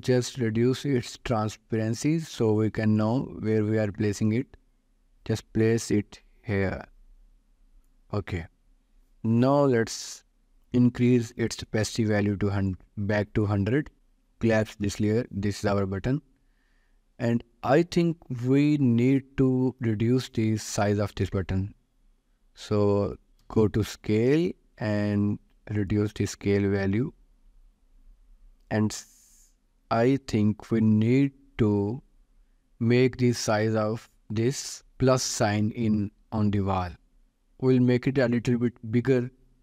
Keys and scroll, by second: 0.3 t, 21.2 ctrl+s, 23.8 s.